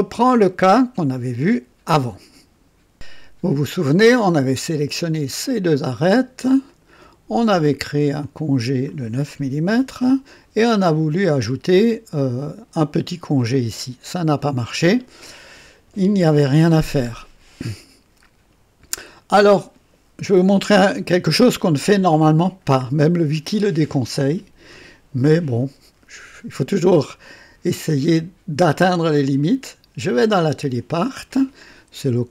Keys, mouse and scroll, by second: 5.2 click, 6.6 ctrl+click, 8.1 click, 9.4 KP_9, 9.7 Return, 16.7 scroll down 2, 17.5-19.5 drag, 28.5 click, 30.3 click.